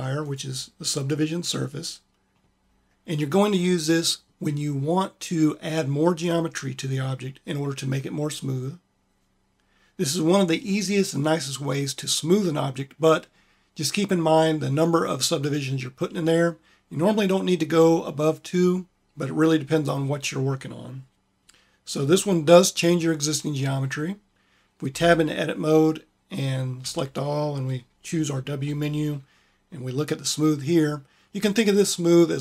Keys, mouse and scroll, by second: 24.7 Tab, 26.6 a, 27.9 q, 28.4 q, 28.4 w.